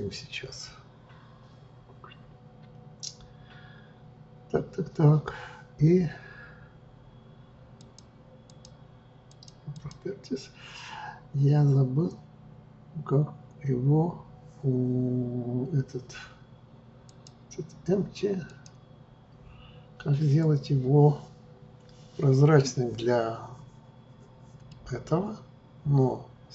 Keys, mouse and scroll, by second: 7.7-18.4 drag, 18.4-21.5 right drag, 24.7-26.5 middle drag.